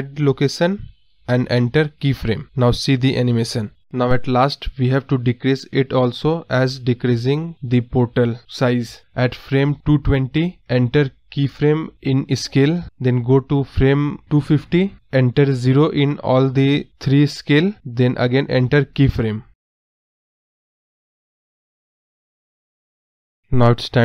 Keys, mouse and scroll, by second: 4.9 space, 5.2 ctrl+z, 6.5-9.4 drag, 9.4 Right, 11.3-16.0 drag, 16.0 space, 17.0 click, 23.4 scroll up 10.